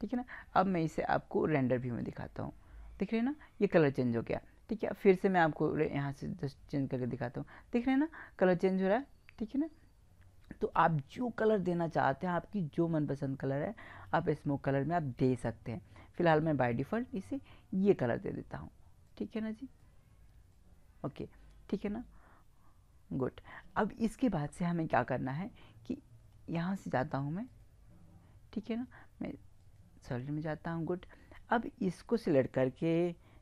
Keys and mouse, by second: 0.6 click, 5.9-7.7 drag, 16.2-18.0 drag, 19.2-23.0 drag, 27.4 click.